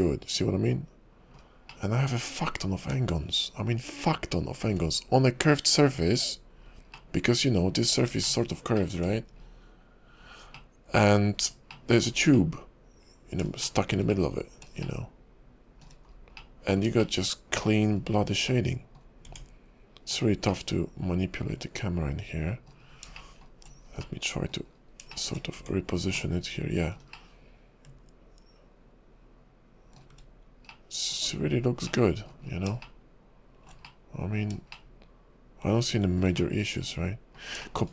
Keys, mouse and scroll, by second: 1.7 shift+middle click, 6.5-6.9 scroll down 3, 6.9 middle click, 8.2 shift+middle click, 8.8 middle click, 9.1-9.9 scroll down 3, 10.5 middle click, 11.2-11.6 scroll up 6, 11.7 middle click, 12.3 middle click, 13.6 shift+middle click, 14.1 middle click, 14.8 shift+middle click, 16.0-16.4 scroll down 2, 16.4 middle click, 17.0 shift+middle click, 18.5 middle click, 19.0 scroll down 1, 19.3 Tab, 20.1 click, 20.5 middle click, 22.8-23.3 scroll up 3, 23.1 shift+middle click, 23.7 scroll up 2, 24.0 middle click, 24.7 scroll up 2, 25.1 middle click, 25.5 Tab, 26.1 middle click, 27.1 shift+middle click, 30.7 middle click, 31.2-31.7 scroll down 7, 31.9 middle click, 32.4 scroll down 2, 32.8 shift+middle click, 33.8 middle click, 34.7 shift+middle click, 36.4 middle click, 37.7 middle click.